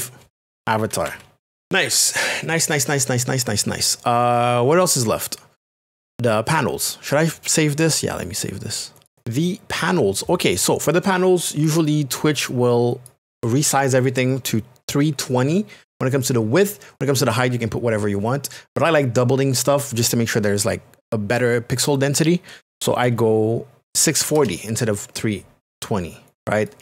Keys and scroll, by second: 0.5-1.5 typing, 9.1 Return, 24.1 KP_6, 24.2 KP_4, 24.4 KP_0.